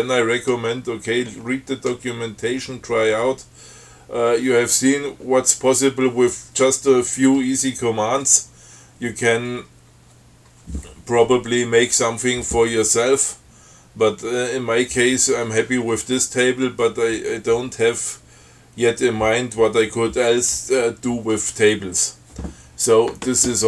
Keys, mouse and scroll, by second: 1.4-2.2 scroll down 4, 2.8-3.1 scroll down 2, 3.5-4.6 scroll down 6.